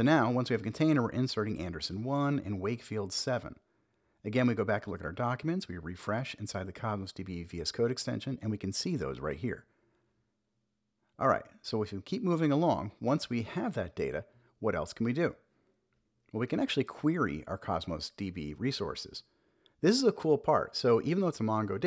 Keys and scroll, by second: 1.7 Return, 8.8 super+b, 9.6 super+j, 14.6 Return, 14.9 super+v, 15.4 super+s.